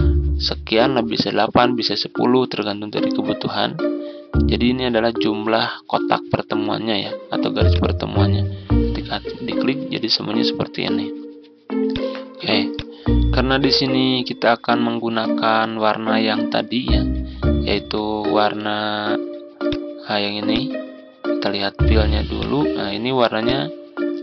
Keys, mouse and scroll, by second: 10.1 scroll up 1, 10.7-11.8 scroll down 1, 11.8-13.9 drag, 17.6 ctrl+z, 18.1 ctrl+z, 19.5-24.2 drag.